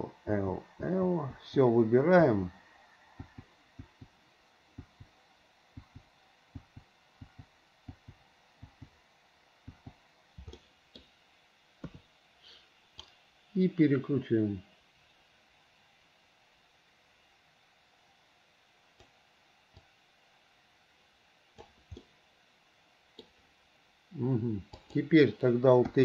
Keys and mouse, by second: 0.0-4.0 typing, 5.0 click, 6.0 click, 6.8 click, 7.4 click, 8.1 click, 8.9 click, 9.9 click, 10.7 middle click, 12.0 KP_3, 13.3 click, 13.9-15.2 middle drag, 15.2-19.2 drag, 19.9 click, 20.3-21.8 drag, 22.2-23.4 middle drag, 23.4 click, 23.4 right click.